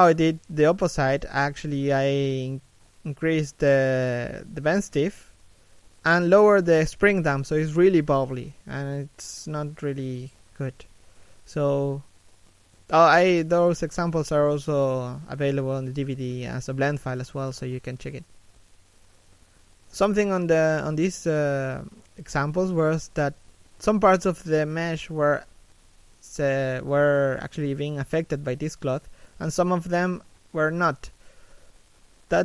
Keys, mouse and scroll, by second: 20.8 scroll down 1, 21.3 middle click, 22.1 a, 22.5 scroll down 1, 22.7 shift+middle click, 23.0 right click, 32.3 a.